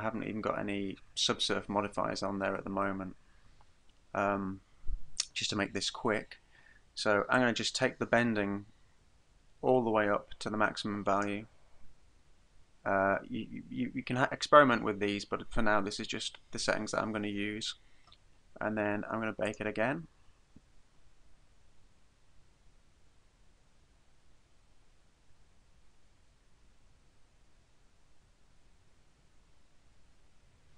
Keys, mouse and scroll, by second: 7.4 click, 19.5 click.